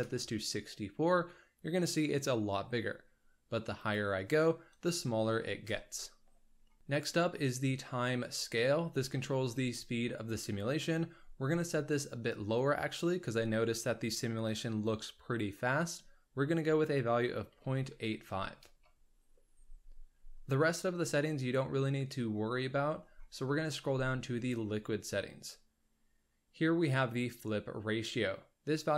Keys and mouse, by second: 3.9-6.3 drag, 8.1-18.2 drag, 18.2-19.3 drag.